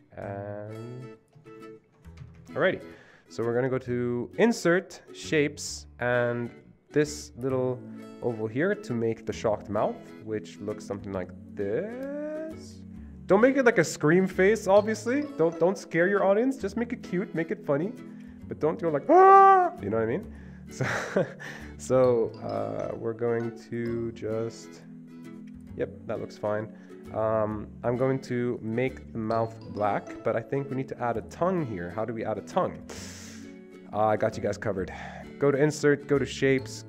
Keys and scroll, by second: 2.3 Escape, 2.4 Escape, 30.9 Escape, 31.1 Escape.